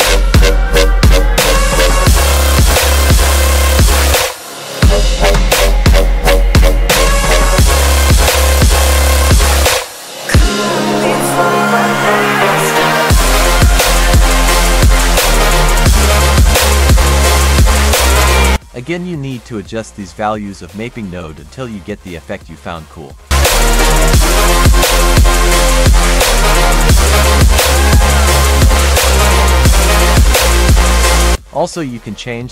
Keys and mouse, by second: 1.7-2.2 drag, 4.1 click, 5.1 F3, 10.1-12.4 drag, 12.7-14.2 drag, 16.6-18.4 drag, 18.7-19.9 drag, 21.7-22.8 drag, 23.3 shift+middle click, 24.5-27.6 drag, 28.3 click, 30.9 drag, 31.4 click.